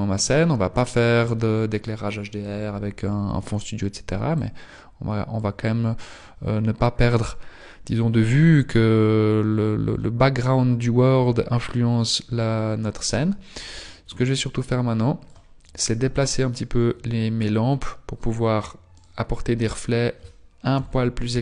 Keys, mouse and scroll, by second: 12.2-14.4 scroll down 2, 14.4 click, 16.4-16.9 scroll up 2, 16.9 scroll up 2, 18.8 right click.